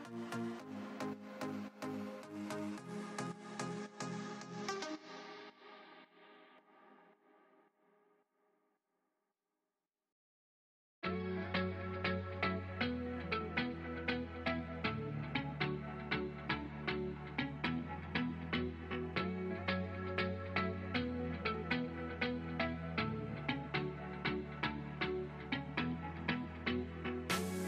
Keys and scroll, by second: 18.4 space, 18.8 ctrl+z, 19.6 space, 21.4 space, 22.3 ctrl+z, 27.2 space.